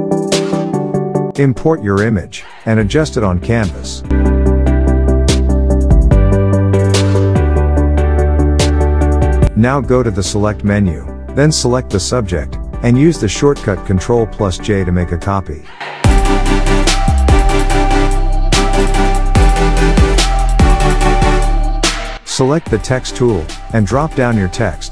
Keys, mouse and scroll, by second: 2.5 alt+Tab, 3.3-5.1 click, 4.2 alt+Tab, 6.7-8.3 drag, 8.3-10.9 drag, 9.4-10.7 shift+click, 10.9 click, 18.8 ctrl+j, 21.1 click, 23.6-24.9 typing.